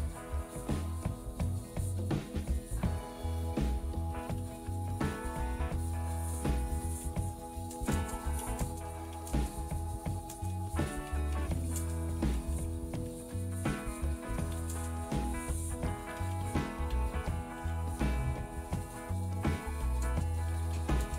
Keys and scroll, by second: 1.4-2.6 typing, 4.2-19.5 typing.